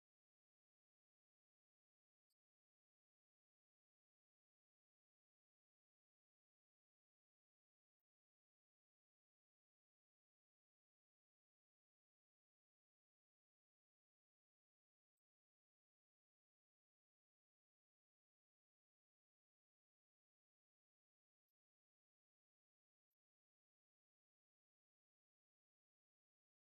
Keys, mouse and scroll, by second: 14.3-15.6 drag, 17.8 click.